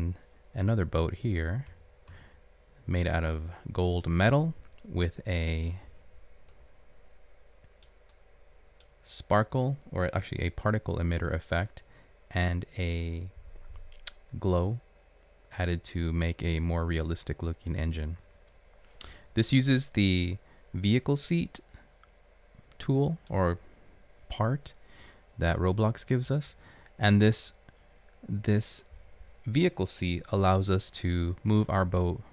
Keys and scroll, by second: 1.6 Up, 1.7 space, 4.8 Right, 19.3 Left, 26.6 Up, 31.0 Up.